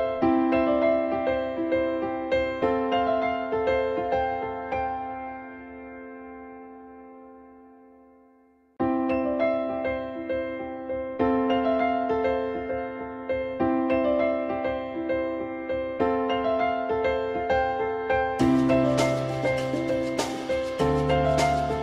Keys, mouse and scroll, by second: 0.0 alt+middle click, 1.8 ctrl+z, 5.3 click, 5.7 ctrl+z, 7.0 ctrl+y, 8.4 alt+middle click, 12.4 shift+click, 15.4 f, 15.5 F2, 20.2 alt+middle click, 20.4 alt+middle click.